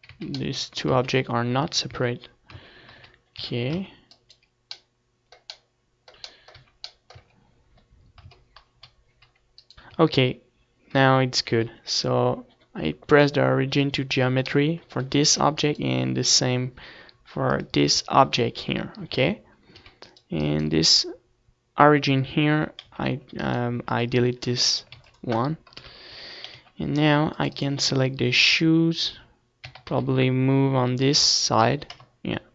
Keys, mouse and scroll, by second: 0.0 Tab, 1.2 Tab, 1.8 Tab, 2.1 z, 2.1 a, 2.5 z, 2.8 Tab, 5.7 z, 6.5 Tab, 7.5 Tab, 7.7 g, 8.8-10.6 right drag, 9.1 z, 10.6 t, 12.1-13.8 drag, 13.8 middle click, 14.4 z, 15.5 right click, 16.6-18.5 drag, 18.2 z, 19.0 z, 19.7-21.6 right drag, 22.2 s, 22.8-24.6 right drag, 23.0 x, 24.2 ctrl+s, 25.1 KP_3, 25.5 z, 25.9 c, 26.9-28.5 right drag, 29.1 r, 30.6-32.5 drag, 31.2 KP_0.